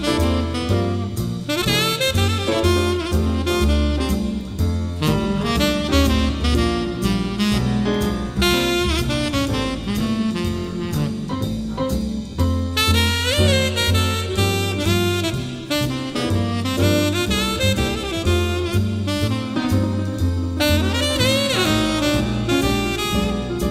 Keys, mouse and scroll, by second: 0.0 scroll, 1.2-5.1 middle drag, 1.2-1.7 scroll, 5.9 middle click, 6.7-8.7 drag, 8.7 m, 9.2-10.4 drag, 11.0 middle click, 11.3 scroll down 1, 11.4 scroll down 1, 11.6 scroll, 11.6-12.7 scroll down 1, 12.6 scroll, 12.7-13.1 scroll down 1, 13.0 scroll, 13.1 scroll down 1, 13.1-13.6 scroll down 1, 13.6 middle click, 14.5 m, 16.5-21.1 drag, 18.2 right click, 21.1-21.5 typing, 21.7 Return, 22.6 shift+t, 23.1 middle click, 23.1-23.6 scroll up 5, 23.6-23.7 drag.